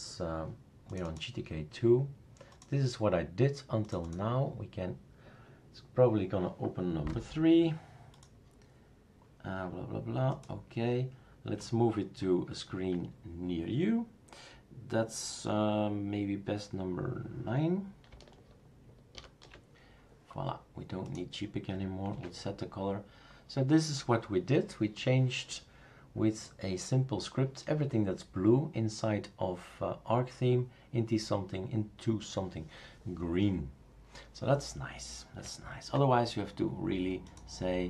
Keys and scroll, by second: 19.1 super+9, 22.1 super+q.